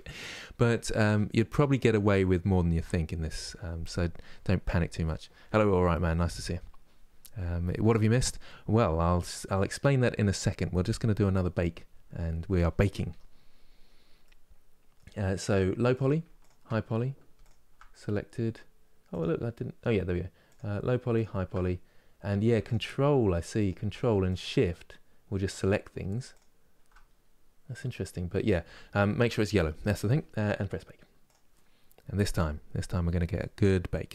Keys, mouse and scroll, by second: 9.2-12.7 middle drag, 12.7 Tab, 13.2-13.9 scroll down 6, 13.9-15.6 middle drag, 15.6 click, 17.1 shift+click, 18.7-20.2 drag, 20.9 shift+click, 23.3 ctrl+click, 24.0 shift+click, 25.2 shift+click, 26.0 shift+click.